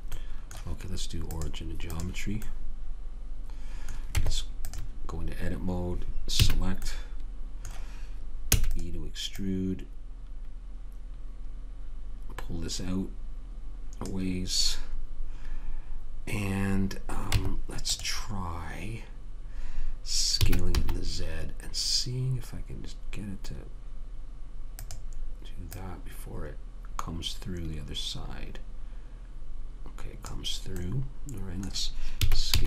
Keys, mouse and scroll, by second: 3.5 middle click, 4.5 Tab, 6.7 a, 8.8 e, 9.7 click, 17.7 Tab, 20.7 s, 26.1 click, 31.1-32.5 middle drag, 32.5 s.